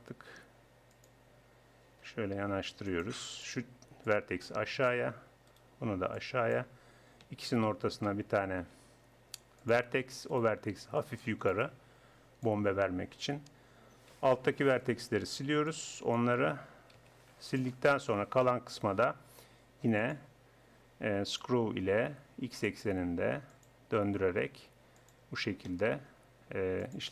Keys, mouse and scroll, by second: 2.2 g, 3.4-5.2 drag, 4.0-5.2 right drag, 5.4 click, 6.0 click, 8.0 click, 8.8 w, 10.4-11.8 drag, 11.0 right click, 12.4-13.6 drag, 14.1 a, 15.4 b, 17.0 x, 18.2 Tab, 22.5-26.1 drag, 26.1 Tab.